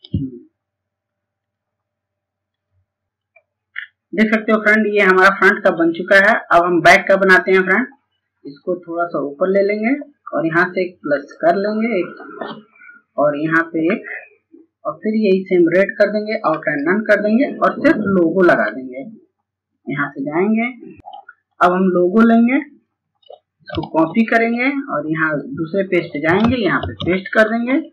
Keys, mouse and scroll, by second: 2.7 scroll down 1, 8.2 click, 10.7 click, 16.2 right click, 16.9 click, 24.9 click, 26.5 ctrl+v.